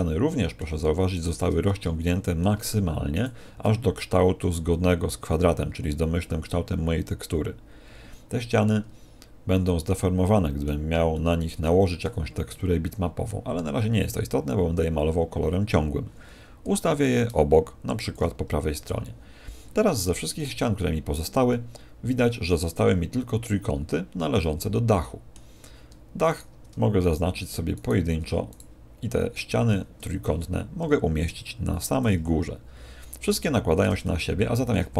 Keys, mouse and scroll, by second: 1.1 shift+right click, 1.6 middle click, 3.6 shift+right click, 8.6 middle click, 11.1 shift+middle click, 18.0 ctrl+click, 20.0 a, 20.4 a, 21.4 middle click, 24.4 middle click, 26.2 right click, 27.0 shift+right click, 27.7 shift+right click, 32.0 ctrl+click, 34.0 shift+middle click.